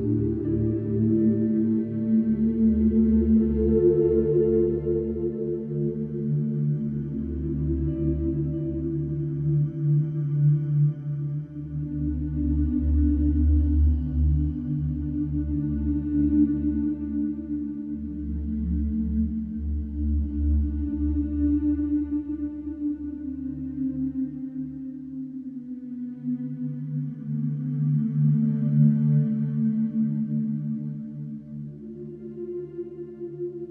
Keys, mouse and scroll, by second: 0.8-4.9 ctrl+drag, 6.0-7.1 drag, 7.8-8.9 drag, 11.3 click, 12.6-12.9 typing, 13.4 Return, 16.4 click, 17.8 click, 19.3-19.7 typing, 20.1 Return, 22.7 click, 24.0 click, 24.9 click, 26.0 5, 26.5 Return, 28.9 click, 29.9 click, 32.1 click.